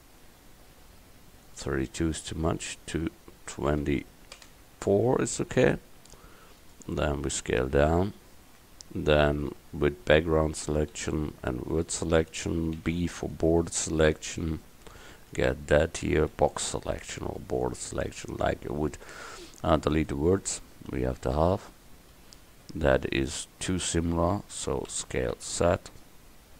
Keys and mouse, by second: 1.5-4.8 drag, 5.6 s, 8.5 Tab, 11.0 a, 12.8 b, 16.4 x, 23.2 Tab, 24.9 s.